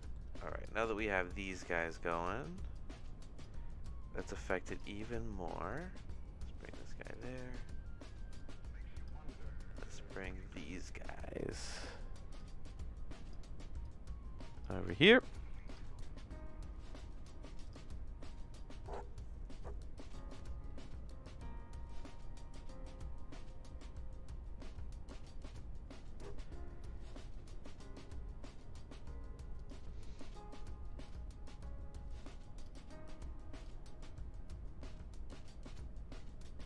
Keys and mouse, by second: 0.6 click, 1.2 click, 2.7 click, 3.8 click, 5.7-6.9 drag, 7.1 click, 8.4 click, 9.4 click, 10.4 ctrl+z, 10.8 click, 12.3 click, 12.7 click, 13.8 click.